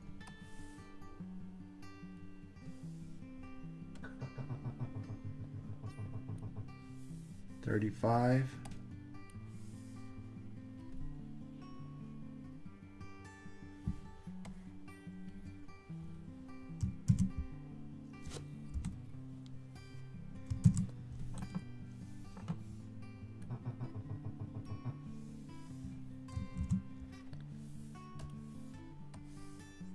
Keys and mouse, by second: 0.4-2.2 drag, 4.1-6.6 drag, 8.8-9.5 drag, 14.5-15.4 drag, 17.1 super+c, 18.8 l, 20.7 super+c, 23.6 click, 26.6 super+v, 28.2 click, 29.2-29.9 drag.